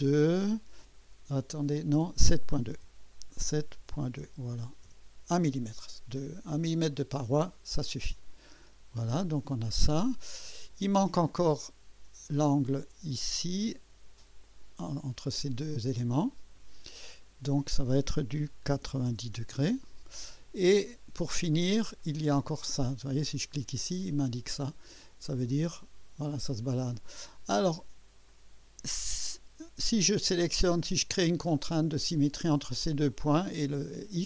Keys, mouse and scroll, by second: 2.7-4.2 typing, 5.4 Return, 7.2 scroll up 1, 8.6-9.9 drag, 12.5 click, 14.4 click, 16.3 click, 18.7 9, 19.0 0, 19.3 Return, 22.0-22.9 drag, 23.6 click, 24.7 typing, 25.5-26.7 drag, 27.0 click, 27.6 scroll down 1, 28.3 right click, 29.0-29.7 typing.